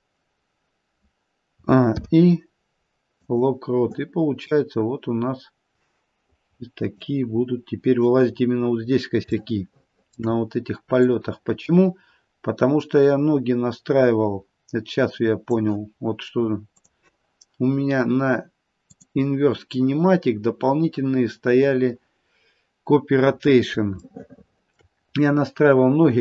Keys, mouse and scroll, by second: 0.3-0.8 scroll down 1, 1.5 a, 1.9 i, 4.5 click, 7.3-8.5 scroll down 2, 8.5-9.1 scroll down 1, 9.5 shift+middle click, 11.0 click, 16.8 click, 18.8 click, 22.3-23.6 scroll up 2, 24.0 shift+middle click, 25.3-26.2 scroll up 2.